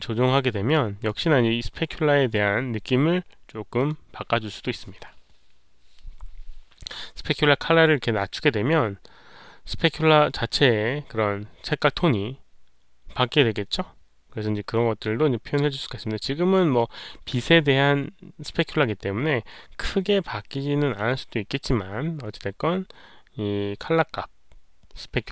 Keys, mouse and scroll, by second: 0.6-1.0 drag, 3.7 click, 6.5 click, 8.3 click, 10.5 click.